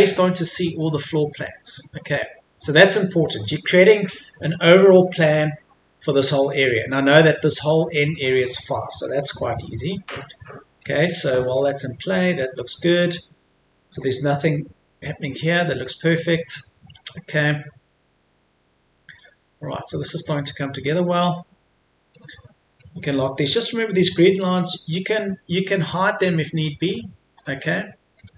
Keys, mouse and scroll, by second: 1.2-4.5 scroll down 1, 4.5-5.0 scroll up 1, 5.0-5.6 scroll down 1, 5.6-6.1 scroll up 1, 6.1 middle click, 7.0-9.0 scroll down 1, 9.0-9.6 scroll up 1, 9.6 middle click, 10.2-10.8 scroll up 1, 10.8-11.4 scroll down 1, 11.4 middle click, 12.8-13.6 scroll up 1, 14.6-15.0 scroll down 1, 15.9 middle click, 17.0-17.6 scroll down 1, 19.5 middle click, 22.2-24.0 drag, 27.4 right click, 28.2 click.